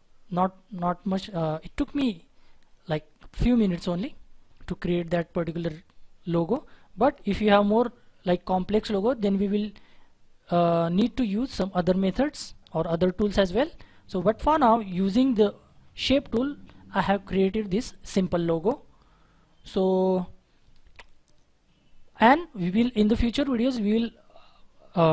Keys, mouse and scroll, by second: 0.3-0.8 scroll down 1, 0.8-3.2 scroll up 1.